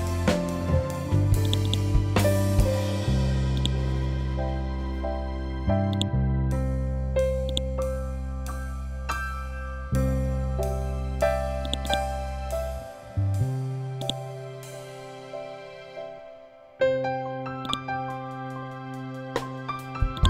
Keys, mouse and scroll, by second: 11.6-17.5 drag, 17.5 click, 20.1 right click.